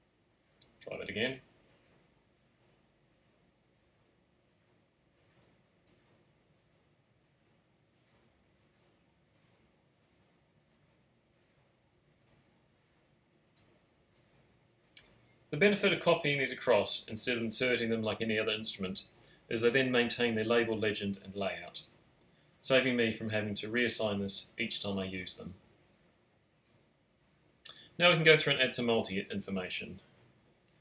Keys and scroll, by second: 14.2 space, 26.7 alt+shift+super+n.